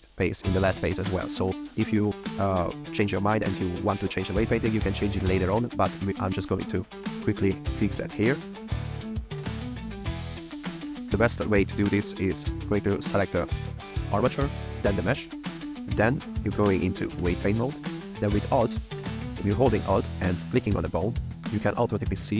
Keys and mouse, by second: 4.0-4.4 drag, 6.7 click, 7.7 click, 8.9 click, 9.7 drag, 10.3 click, 12.1 click, 14.7 shift+click, 15.6-17.2 drag, 20.6 alt+click.